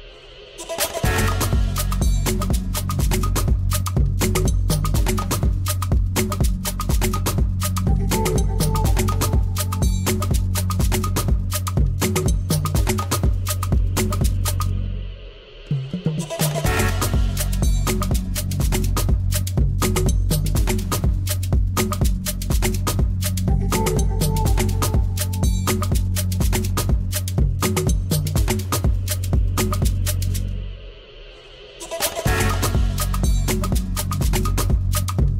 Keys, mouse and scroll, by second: 2.5 z, 2.9-3.5 scroll up 2, 5.4 shift+d, 6.2 alt+s, 7.7 shift+d, 8.4 alt+s, 9.6 shift+d, 10.1 alt+s, 11.8 shift+d, 12.4 alt+s, 13.7 shift+d, 14.3 alt+s, 17.3 scroll up 2, 17.5-18.7 middle drag, 19.7-21.6 middle drag, 22.5 scroll down 1, 22.6 middle click, 24.3 click, 24.6 shift+middle click, 24.6-25.0 scroll up 4, 25.2 scroll down 1, 25.8 shift+d, 26.3 alt+s, 29.4 shift+d, 30.1 alt+s, 33.5 shift+d, 33.9 alt+s.